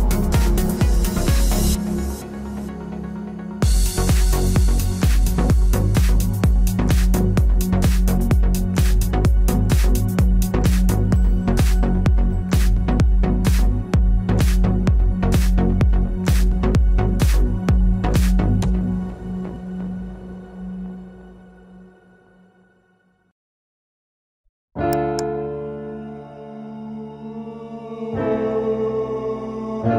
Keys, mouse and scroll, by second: 5.2 z, 5.7 z, 8.4 ctrl+Tab, 9.9 KP_Decimal, 10.7 b, 11.2 g, 13.1-14.7 right drag, 13.4 b, 13.7 g, 15.2 b, 15.5 g, 16.5 b, 17.3 g, 18.3 ctrl+Tab, 19.2 right click, 20.0 c, 21.0 click, 21.0 right click, 21.3 click, 21.6-23.5 middle drag, 22.0 c, 24.0-25.9 middle drag, 24.4 c.